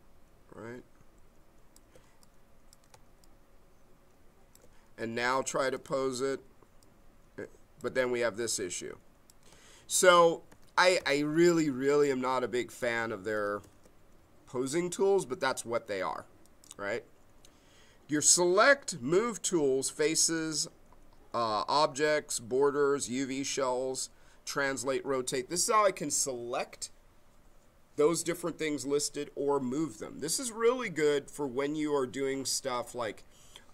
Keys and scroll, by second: 12.1 ctrl+z.